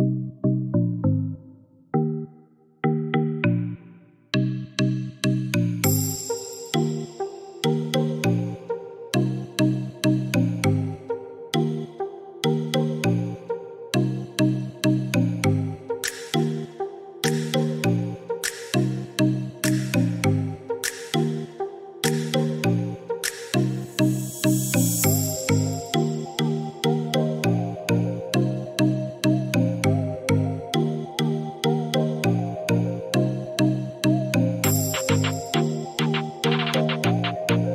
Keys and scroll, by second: 13.8 2, 13.9 Return.